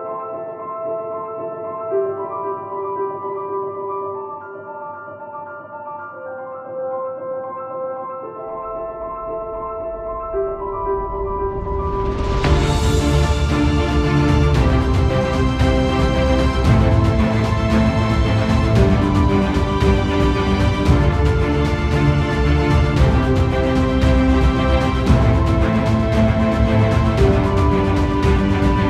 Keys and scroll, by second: 5.3 alt+space, 8.5 ctrl+alt+z, 18.7 ctrl+alt+z, 20.4 ctrl+alt+z.